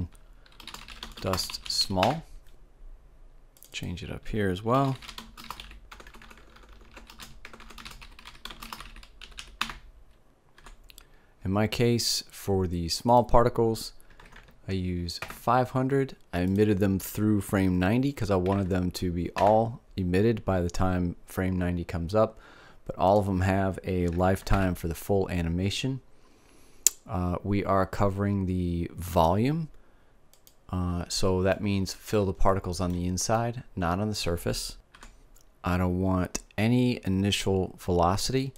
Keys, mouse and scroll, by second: 0.5-1.8 drag, 2.2 l, 3.9-6.0 drag, 6.4-8.0 typing, 9.7 l, 13.6-15.5 drag, 14.8 KP_0, 16.9-18.9 drag, 23.5-25.3 drag, 29.6-32.8 drag, 32.8-34.4 middle drag, 35.5-38.5 middle drag.